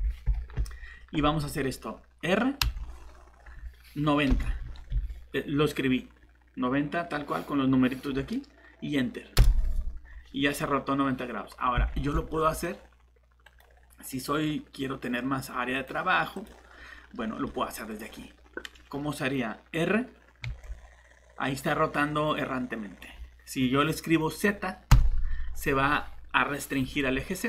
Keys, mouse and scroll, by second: 2.6 shift+r, 4.3 9, 4.6 0, 9.4 Return, 11.9 ctrl+z, 13.4 right click, 15.7 click, 17.1 scroll down 1, 17.4 middle click, 18.0 scroll up 1, 20.4 r, 24.9 z.